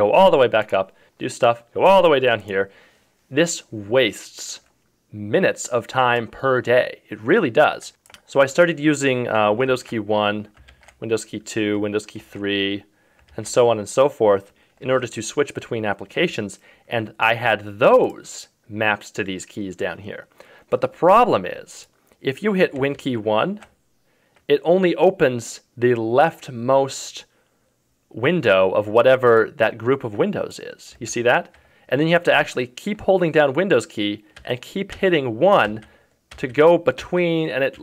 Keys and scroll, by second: 9.7 super+2, 10.7 super+1, 12.2 super+3, 13.3 super+4, 22.9 super+1, 23.6 super+1, 31.1 super+1.